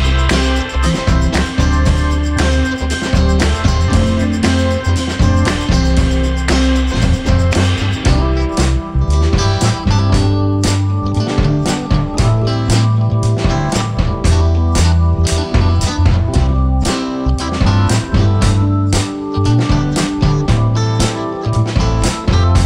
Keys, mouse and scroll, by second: 3.6 click, 9.9-13.9 drag, 20.4 v.